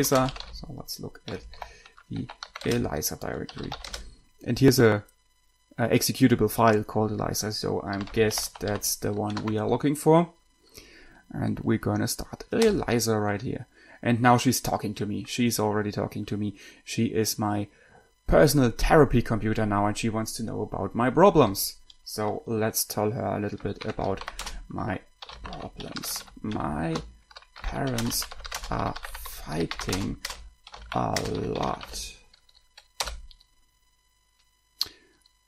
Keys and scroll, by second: 0.0-4.3 typing, 8.0-9.7 typing, 12.8 Return, 24.2-32.6 typing, 33.3 Return.